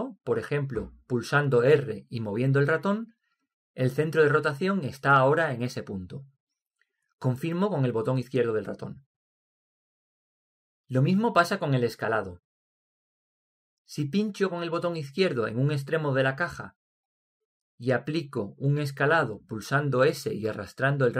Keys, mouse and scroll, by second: 0.0 r, 12.9-16.1 middle drag, 16.8-18.6 drag, 20.4 s.